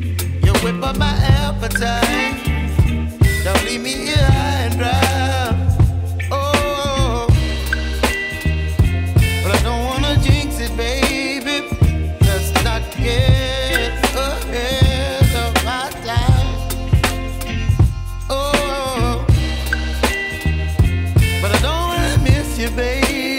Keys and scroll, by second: 7.1 Escape.